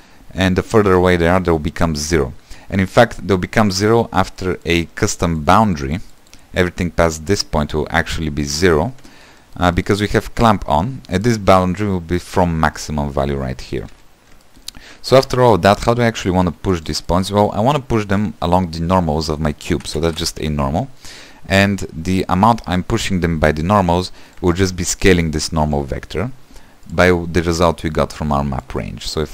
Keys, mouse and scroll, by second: 18.6-21.1 shift+middle drag, 21.1 shift+a, 23.8 q, 25.7 click, 26.9-28.6 drag.